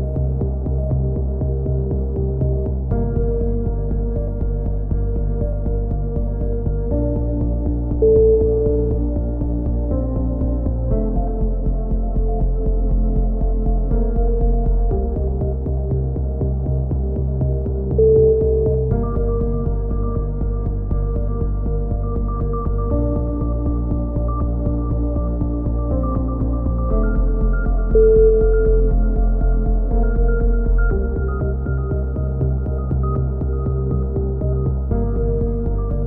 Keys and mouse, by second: 2.7 c, 3.1 right click, 4.1 click, 6.2 ctrl+z, 6.3 ctrl+z, 6.7 ctrl+z, 7.0 ctrl+z, 7.3 ctrl+z, 7.9 KP_3, 8.9 c, 12.3 click, 12.4 middle click, 13.4 KP_7, 14.2-15.2 drag, 14.9 s, 17.2 c, 18.7-19.7 drag, 19.1 s, 20.6 c, 21.6-22.6 drag, 22.6 s, 24.4 c, 25.7 click, 26.1 right click, 26.2 s, 28.9 a, 29.5 z, 30.0 click, 35.0 KP_3, 35.3 z, 35.6 click.